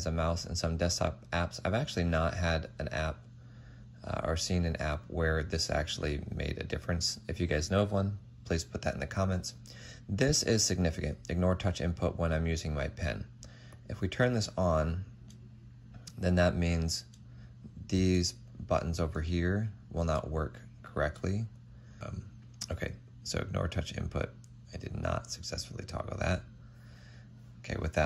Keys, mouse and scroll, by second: 15.0 p, 19.1 ctrl+z.